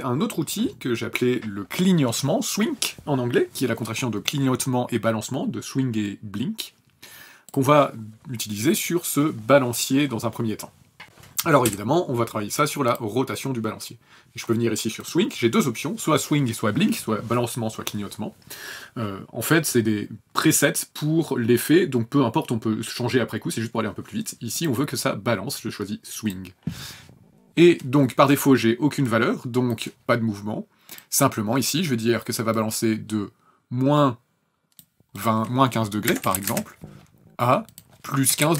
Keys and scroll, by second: 11.0 Return, 11.6 r, 36.1 KP_Subtract, 36.4 KP_1, 36.4 KP_5, 36.5 KP_Enter, 38.3 KP_1, 38.4 KP_5.